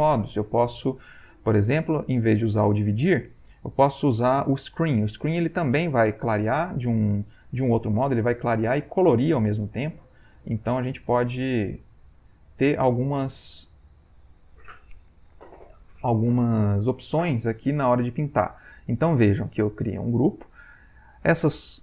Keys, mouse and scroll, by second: 2.7-5.4 drag, 7.5 click, 8.0-10.4 drag, 10.7-14.8 shift+drag.